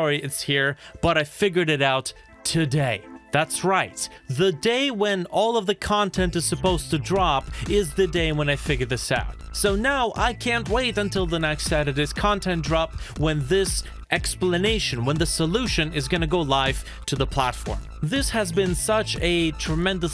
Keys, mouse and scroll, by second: 4.6 i, 7.6 i, 11.0-11.4 scroll down 1, 11.8 shift+middle click, 12.1-12.7 shift+scroll up 4, 12.9 shift+middle click.